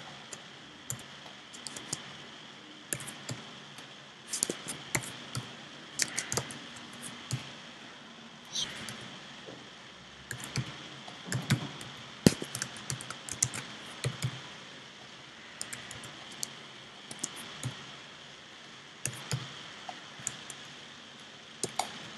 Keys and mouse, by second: 0.9 c, 2.9 w, 3.1 Escape, 3.1 z, 3.2 i, 4.9-6.6 super+drag, 5.5 x, 6.1 x, 7.9 c, 8.9 b, 10.4 s, 11.5-14.1 typing, 15.7 a, 16.0 c, 17.7 i, 19.1 s, 20.7-22.1 drag.